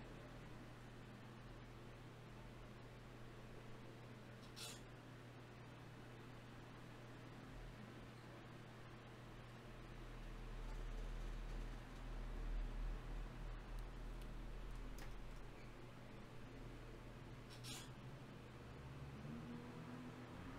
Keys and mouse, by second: 1.9 click, 2.9 ctrl+r, 4.3 Escape, 6.1 k, 9.3-12.1 drag, 10.1 g, 12.1 right click, 12.8-14.2 drag, 14.2-15.7 middle drag, 16.1-18.3 right drag, 18.3 ctrl+shift+b, 20.0 click, 20.4-20.5 drag.